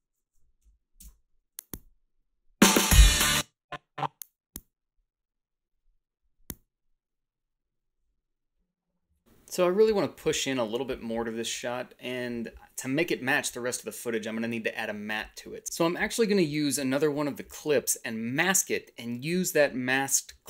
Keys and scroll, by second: 0.6 Delete, 0.9 space, 3.1 space, 16.2 Delete.